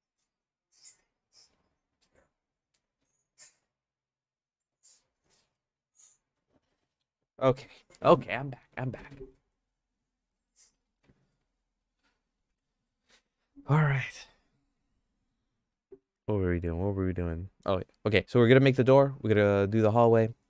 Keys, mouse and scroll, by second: 18.6 middle click, 18.9 shift+middle click, 20.0 middle click.